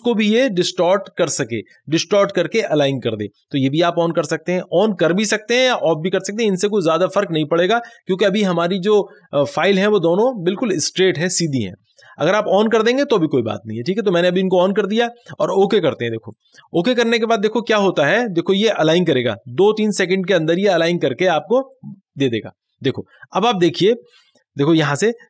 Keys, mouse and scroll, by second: 3.8 click, 3.8 click, 12.0 click, 16.4 click, 24.1 click, 24.2 click.